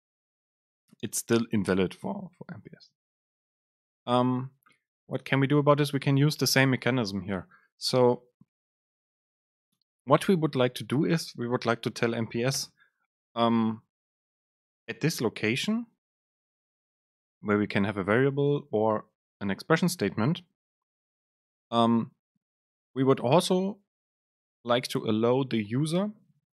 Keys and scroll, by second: 2.9 BackSpace, 11.6 Return, 12.7 super+space.